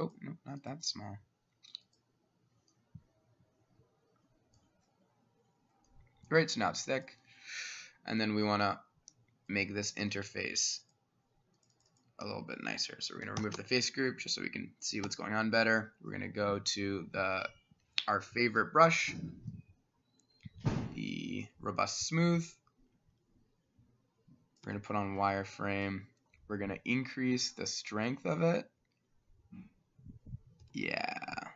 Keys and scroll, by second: 8.1 Escape, 10.1 s, 13.4 ctrl+shift+g, 14.3 Escape, 15.1 Escape, 18.6-23.6 [, 24.7 w, 30.8 w.